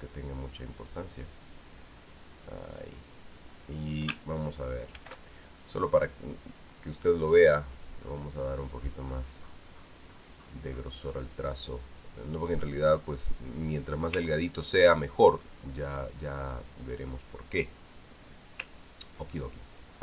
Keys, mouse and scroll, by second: 1.8 click, 3.9 click, 5.7 ctrl+shift+f, 7.6 click, 8.4-9.8 scroll up 4, 10.2 scroll up 1, 10.8-12.1 scroll up 3, 13.0 click, 15.1-15.7 ctrl+scroll up 2, 15.7 ctrl+scroll down 2, 15.9-16.8 ctrl+scroll up 2, 16.8 scroll up 1, 17.6-18.9 drag, 19.5 ctrl+scroll down 2.